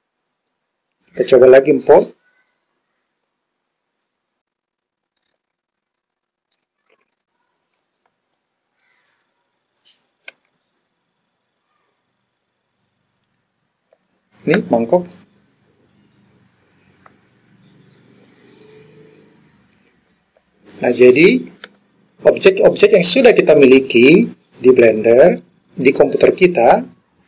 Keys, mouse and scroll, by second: 6.8 click, 6.8 Left, 7.1 Left, 10.4 s, 14.0 click, 17.1 click, 18.3 click, 20.5 click, 26.8-27.2 drag.